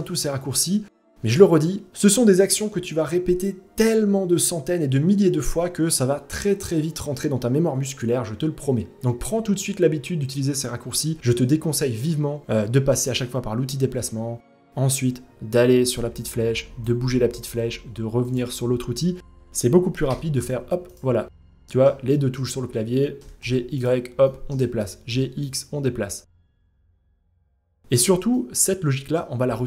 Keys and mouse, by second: 8.8-9.9 middle drag, 12.7-16.4 drag, 19.6 g, 21.0-21.4 middle drag, 21.7 shift+middle drag, 22.8 g, 23.8 shift+middle drag, 24.4 g, 25.9 g, 26.6 middle drag, 27.1 g, 27.9-28.7 middle drag, 29.0 g.